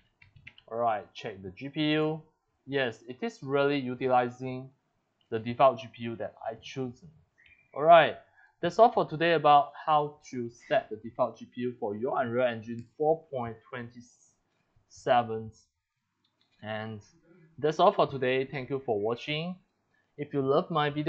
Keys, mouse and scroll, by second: 0.0-1.1 typing, 1.9 click, 8.5 click, 10.0 click, 12.2 click.